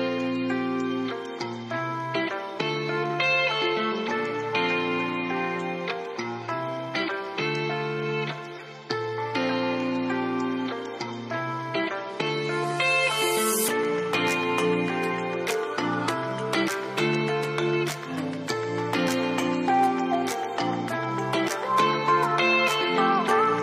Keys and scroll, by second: 3.6-5.1 typing, 9.2 typing, 11.8 typing, 15.4 typing, 18.2-19.0 typing.